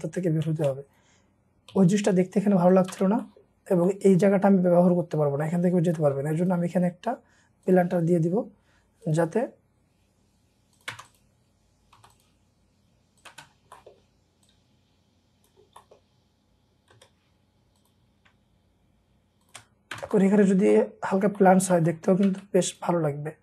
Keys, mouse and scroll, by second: 0.6 middle click, 1.7 typing, 3.2 middle click, 3.2 space, 3.6 scroll down 1, 3.8 middle click, 5.2-5.7 scroll down 1, 6.0 middle click, 8.0 scroll up 1, 10.9 space, 12.0 typing, 13.8 middle click, 14.1-15.7 scroll down 1, 15.7 scroll up 1, 15.8 middle click, 16.0-16.9 scroll down 1, 16.7-18.3 typing, 17.3-18.3 scroll up 1, 19.4 shift+click, 19.7 scroll down 1, 19.9 space, 20.2 middle click, 20.4 scroll down 1, 20.7 middle click, 21.3-21.8 scroll up 1, 21.8 middle click, 22.3 space, 22.7-23.4 scroll up 2.